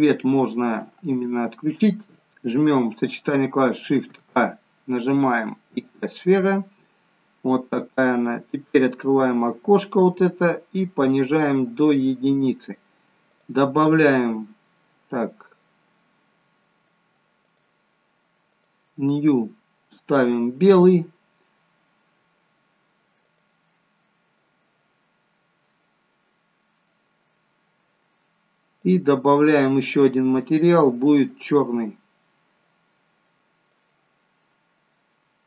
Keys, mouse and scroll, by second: 7.1-7.7 scroll up 4, 8.8 click, 8.8-9.4 scroll up 5, 17.3 click, 18.4 click, 28.8 click.